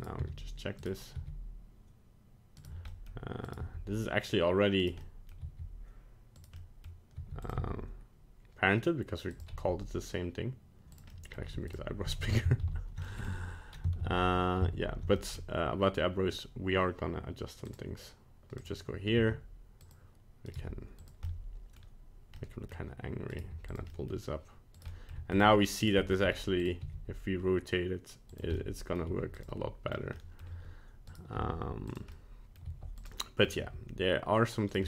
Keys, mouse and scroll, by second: 0.0 right click, 0.2 g, 1.1 g, 2.9 middle click, 3.5 right click, 3.6 g, 5.0 middle click, 5.4 g, 6.6 middle click, 7.2 g, 7.6 r, 9.5 s, 11.1 middle click, 11.4 g, 12.5 ctrl+z, 12.7 ctrl+z, 13.1 middle click, 13.2 middle click, 14.1 ctrl+z, 14.7 ctrl+z, 15.2 middle click, 17.6 click, 18.6 click, 19.2 g, 20.5 right click, 21.0 g, 21.2 middle click, 21.7 middle click, 22.3 middle click, 23.3 right click, 23.7 g, 23.9 middle click, 24.8 right click, 24.9 middle click, 25.1 middle click, 25.2 g, 25.8 right click, 26.1 g, 26.8 r, 28.5 middle click, 29.1 g, 29.5 middle click, 30.2 middle click, 31.1 right click, 31.4 g, 32.1 middle click, 32.5 middle click, 32.6 g, 33.1 middle click, 33.2 middle click, 33.4 middle click, 33.5 g.